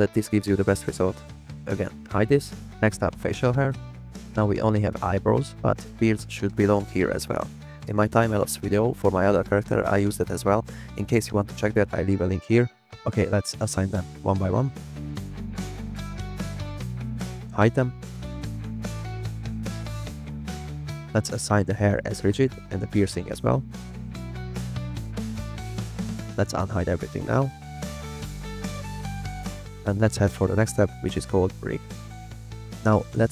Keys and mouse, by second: 1.9 click, 4.8 middle click, 5.4 middle click, 6.9 shift+middle click, 7.3 middle click, 7.7 click, 8.2 shift+middle drag, 13.2 click, 14.0 click, 16.8 click, 17.2 click, 18.2 click, 18.5 click, 19.5 click, 20.3 middle click, 21.4 middle click, 23.0 click, 24.1 click, 24.3 click, 24.6 click, 24.9 click, 27.2 click, 28.5 click, 28.8 drag, 29.3 drag, 29.5 click, 29.8 click, 30.2 drag, 31.7 click.